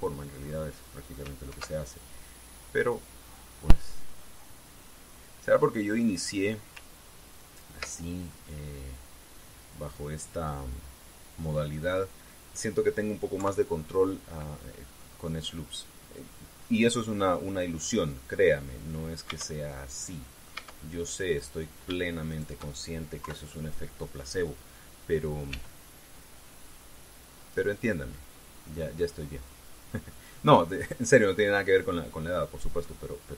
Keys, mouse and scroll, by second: 2.2 ctrl+r, 2.8 ctrl+click, 6.8 click, 9.0-13.5 middle drag, 14.1 KP_3, 15.8 scroll up 2, 17.0 scroll down 2, 18.6 scroll up 2, 20.0 Tab, 20.4 middle click, 21.3 Tab, 22.1 right click, 23.0 shift+right click, 24.0 KP_3, 26.2 g, 28.2 click, 29.9-30.3 scroll down 1, 30.8 middle click, 32.4 middle click.